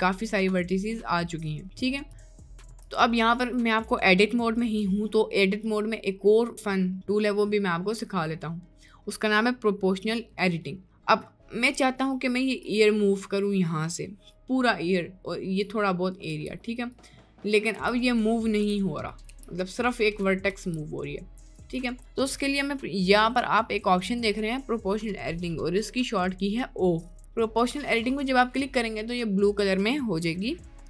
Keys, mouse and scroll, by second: 0.6 right click, 1.4 middle click, 1.8-2.8 middle drag, 2.2 Tab, 3.0 Tab, 3.2 middle click, 4.0 middle click, 5.2 middle click, 6.5 middle click, 6.9 middle click, 7.8 middle click, 8.8 middle click, 9.2 middle click, 10.0 middle click, 11.5 middle click, 12.6 click, 13.1 middle click, 13.7 middle click, 16.4 g, 17.8 g, 18.7 g, 19.4 g, 20.5 g, 28.4 click, 30.7 middle click.